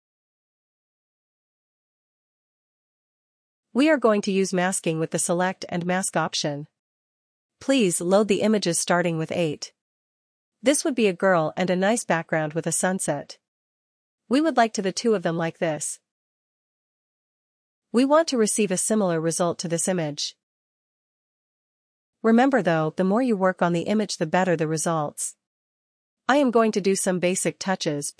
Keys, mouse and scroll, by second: 0.5 click.